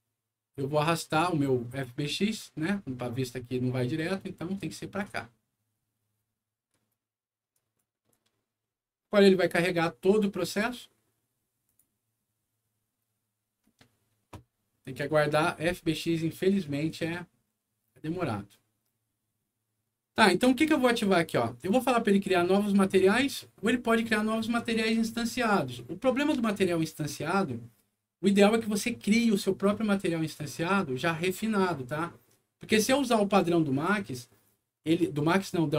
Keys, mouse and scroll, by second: 1.1-4.9 drag, 7.5 click, 11.6 click, 21.6 click.